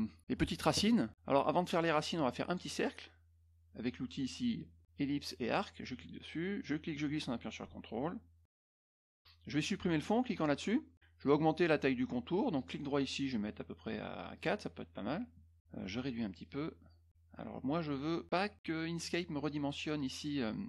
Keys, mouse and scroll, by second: 2.4 click, 5.8 click, 6.6-8.9 drag, 10.3 click, 12.5 right click, 14.3 click, 16.3 ctrl+click.